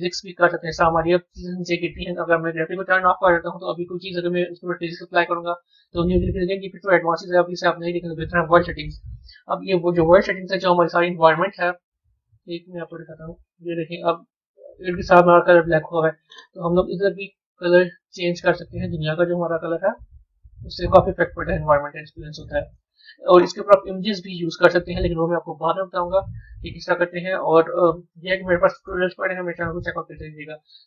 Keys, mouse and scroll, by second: 0.3 click, 4.0-7.1 middle drag, 7.1 click, 8.2 click, 11.5 z, 13.6-15.7 middle drag, 15.7 click, 25.7 z, 30.5 click.